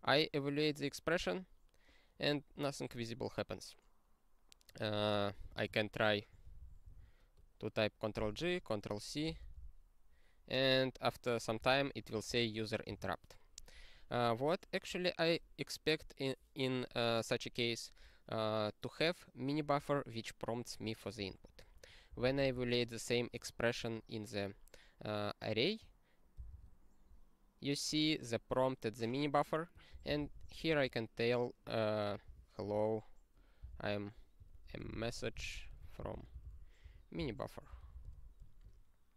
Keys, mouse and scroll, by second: 6.9 super+o, 9.4 ctrl+c, 12.3 click, 12.9 q, 14.2 click, 14.4 click, 14.9 click, 22.1 ctrl+n, 22.2 ctrl+n, 22.3 ctrl+n, 22.5 ctrl+n, 38.4 r.